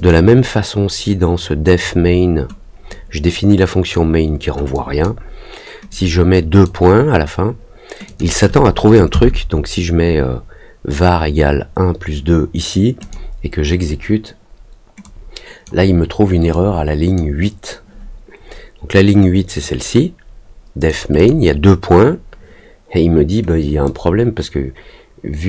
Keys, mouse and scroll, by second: 2.8-3.9 drag, 4.7 click, 5.8 click, 8.0 click, 12.9 click, 15.0 click, 16.5 click, 19.5-20.8 drag, 21.1 click, 23.8-25.4 drag.